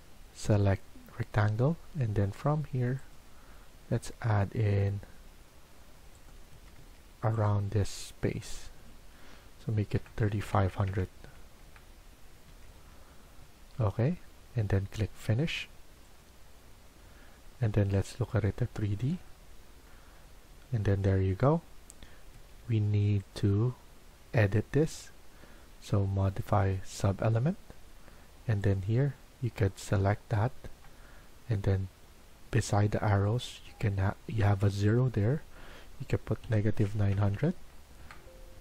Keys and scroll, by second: 6.4 Escape, 6.7 Escape, 9.6-10.8 typing, 11.5 Return, 12.4 Escape, 12.7 Escape, 22.3 Escape, 22.5 Escape, 36.1-37.5 typing, 38.0 Return.